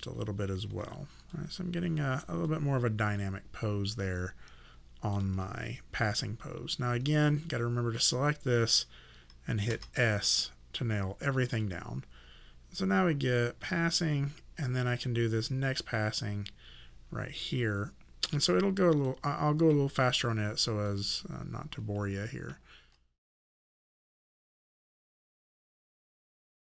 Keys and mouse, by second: 0.7 e, 1.4 click, 2.5 alt+click, 8.0 click, 9.7 s, 11.7 click, 20.9 click, 23.2 click, 23.4 KP_0, 23.7 click, 23.9 KP_0, 24.2 click, 24.5 alt+click, 25.0 right click, 25.2 click, 25.4 w, 25.5 click.